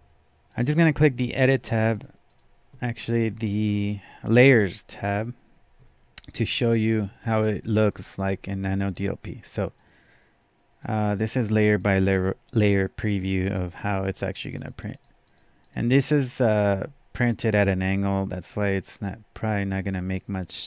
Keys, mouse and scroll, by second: 0.5 click, 1.9 right click, 2.3 click, 4.3-11.4 drag, 7.4 scroll down 1, 7.9 scroll up 1, 11.4 click, 11.8 click, 12.1 click, 12.6 click, 13.4 click, 14.0 click, 15.0 click, 15.6 click, 16.0 click, 16.5 click, 17.3 click, 19.0 click, 19.8-20.6 drag.